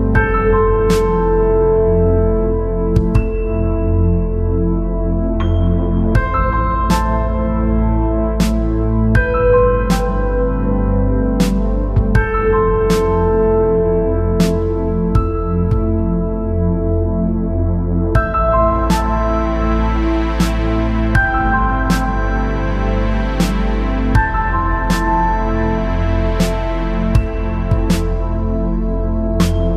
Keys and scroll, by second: 25.7 ctrl+z, 27.6 ctrl+z.